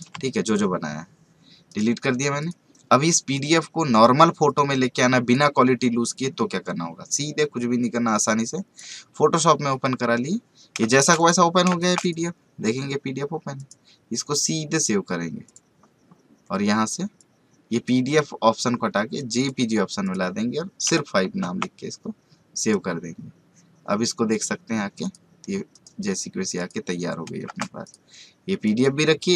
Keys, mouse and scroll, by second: 1.7 right click, 2.4-10.9 drag, 10.9 right click, 11.1 click, 11.7 space, 11.7 right click, 12.0 click, 22.6 click, 25.7 right click, 26.6 click, 28.1 click.